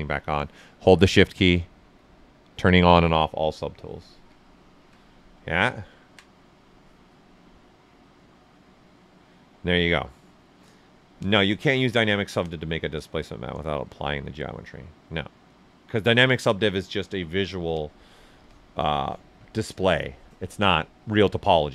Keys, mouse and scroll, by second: 1.2 shift+click, 4.4 alt+right click.